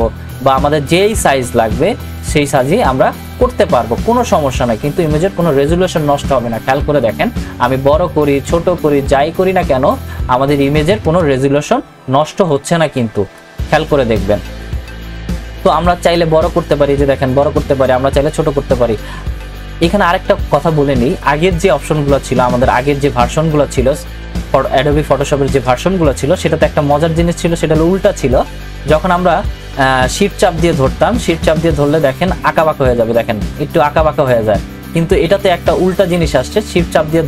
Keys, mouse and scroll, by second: 32.6-37.2 shift+drag.